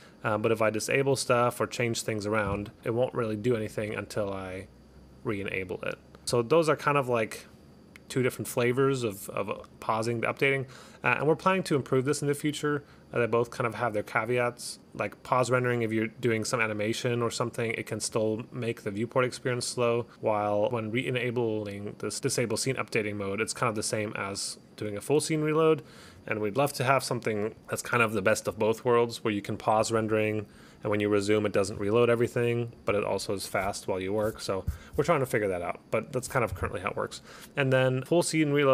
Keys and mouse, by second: 0.5 click, 1.9 click, 3.8 click, 6.2 click, 7.0 click.